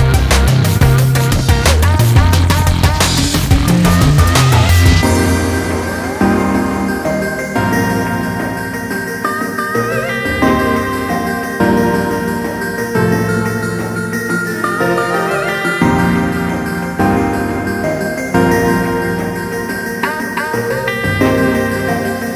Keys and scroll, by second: 7.6 ctrl+space.